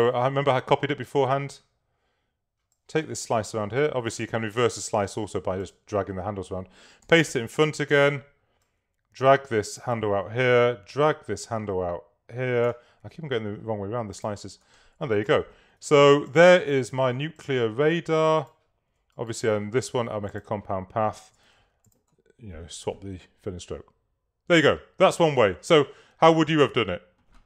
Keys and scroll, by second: 7.1 alt+super+f, 21.6 shift+x.